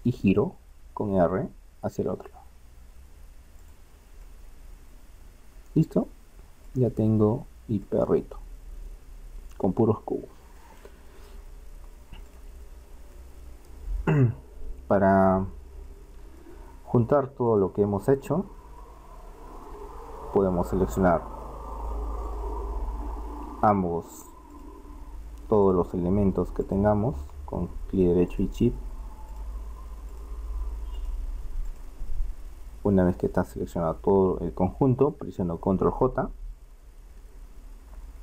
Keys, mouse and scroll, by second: 0.8 r, 4.4-6.2 middle drag, 7.0-9.8 middle drag, 13.5-14.9 middle drag, 16.1 middle click, 17.5-19.0 right drag, 19.0-20.2 middle drag, 21.7 middle click, 22.2-25.7 right drag, 30.4-32.2 right drag, 32.2-36.7 middle drag, 37.1 ctrl+j.